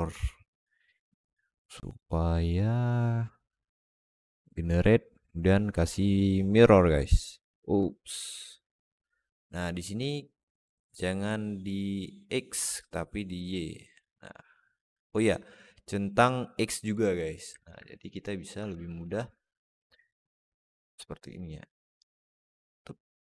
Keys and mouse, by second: 6.9 click, 12.5 click, 13.2 click, 13.9 alt+middle click, 16.7 click, 17.4 alt+middle click, 18.0 click, 18.4 Tab, 18.9 Tab, 20.5 alt+middle click, 21.2 click, 21.4-23.2 drag.